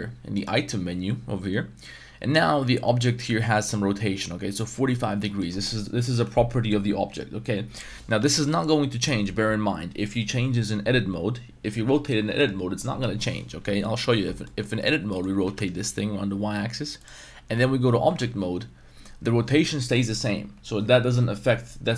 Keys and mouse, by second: 5.4 middle click, 8.3 ctrl+z, 13.6 Tab, 13.9 middle click, 14.5 middle click, 15.1 middle click, 15.4 r, 15.7 y, 17.0 click, 18.0 Tab.